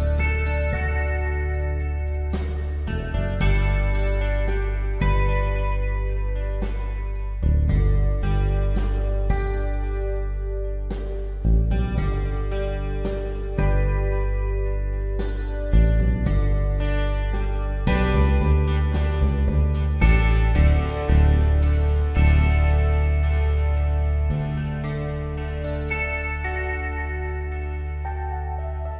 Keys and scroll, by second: 1.2-1.6 typing, 8.8 x, 24.7 Return.